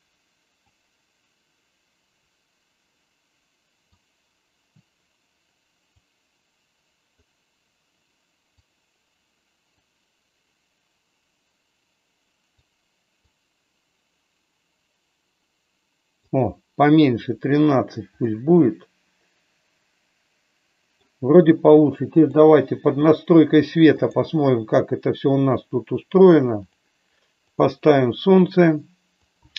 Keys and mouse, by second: 0.6-7.1 drag, 7.2-8.9 drag, 9.7-12.6 drag, 13.2-16.2 drag, 18.2-21.0 middle drag, 26.5 click, 29.4-29.5 drag.